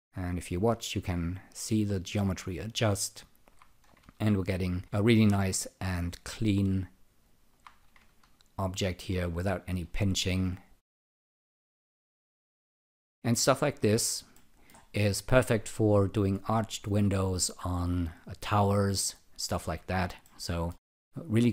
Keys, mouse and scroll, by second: 2.7 alt+click, 4.0 ctrl+r, 5.4 alt+right click, 5.9 alt+click, 8.0 ctrl+r, 9.4 alt+right click, 9.8 alt+click, 11.8 alt+right click, 12.3 alt+click, 12.9 alt+right click, 14.3 alt+middle click, 15.0 alt+click, 20.2 alt+middle click.